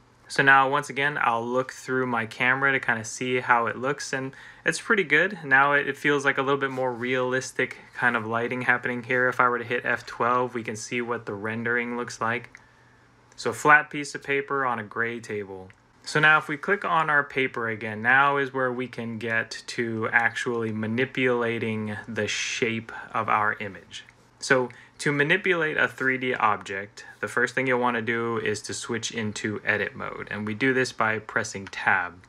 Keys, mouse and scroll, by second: 2.4 middle click, 9.8 F12, 15.8 Escape, 31.5 Tab.